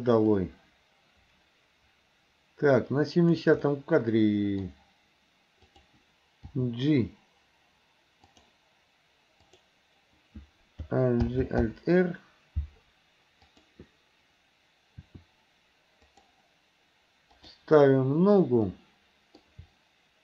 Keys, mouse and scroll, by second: 0.4-3.5 drag, 3.7-4.7 middle drag, 5.7 click, 6.5 g, 9.5 click, 11.3 alt+g, 11.7 alt+r, 13.5 click, 15.1 r, 17.3 click, 18.7-19.4 middle drag.